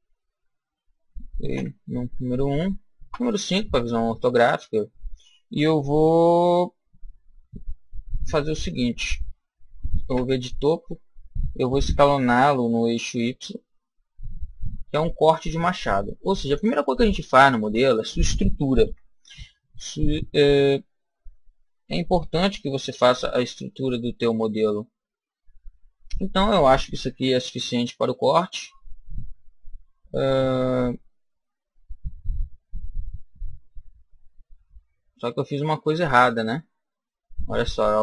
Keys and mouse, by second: 1.4 KP_1, 2.9 KP_5, 4.0-6.4 middle drag, 9.9 KP_7, 12.3 s, 16.5 click, 18.7 KP_1, 24.1-25.9 middle drag, 27.0 KP_1, 31.3-35.1 middle drag.